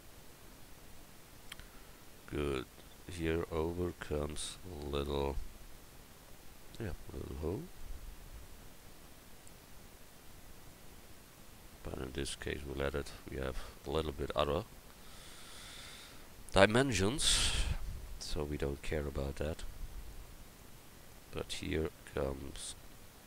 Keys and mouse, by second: 16.8 shift+d, 20.1-21.6 drag.